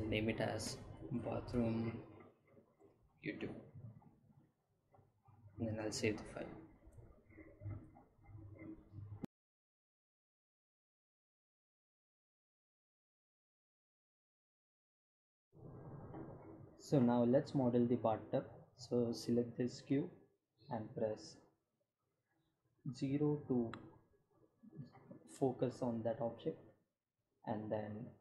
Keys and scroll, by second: 0.0-0.7 typing, 2.0 y, 2.6 t, 22.8 Delete.